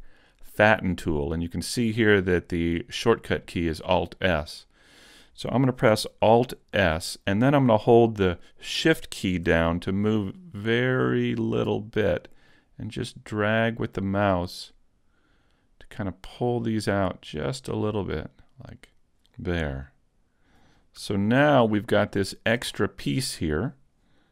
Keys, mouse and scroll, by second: 6.8 alt+s, 18.9 click, 19.9 middle click, 20.7 scroll up 1, 21.0 a, 21.6 middle click, 22.2 shift+middle click, 22.7 middle click.